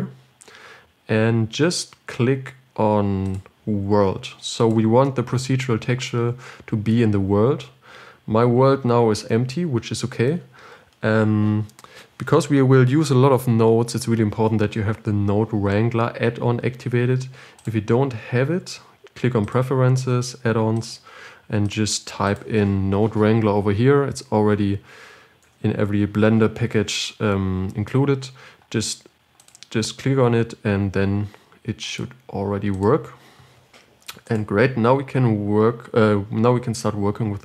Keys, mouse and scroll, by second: 20.2-22.1 drag.